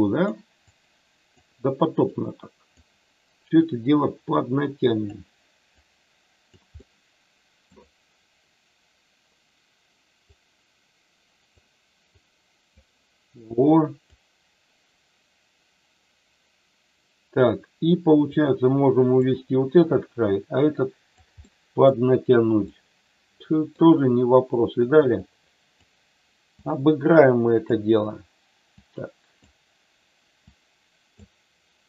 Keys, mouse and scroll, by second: 0.7 click, 2.1 click, 4.3 click, 5.7 click, 6.8 middle click, 10.3-11.6 drag, 12.1 click, 13.7 click, 18.2 click, 20.0-21.2 drag, 21.3 middle click, 22.6-23.7 middle drag, 25.2 click, 26.4-27.6 drag, 28.7 click, 30.4 click.